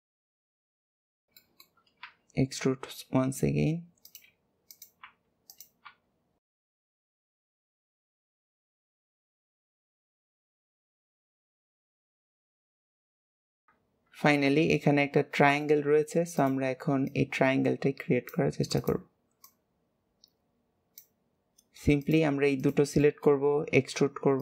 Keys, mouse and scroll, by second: 1.0 shift+middle click, 2.0 e, 4.6 click, 6.8 click, 7.5 shift+click, 8.1 scroll up 1, 8.2 shift+middle click, 8.4 s, 9.5 click, 9.6 g, 10.4 click, 10.5 g, 11.0 g, 12.1-12.7 scroll down 2, 12.3 middle click, 12.5 alt+z, 12.7 middle click, 13.3 click, 13.4 shift+click, 13.6 KP_1, 15.3 shift+middle click, 15.8 scroll up 1, 16.3 click, 16.9 click, 18.7 click, 19.3 click, 21.9 click, 22.5 shift+click, 23.0 shift+middle click, 23.5 e.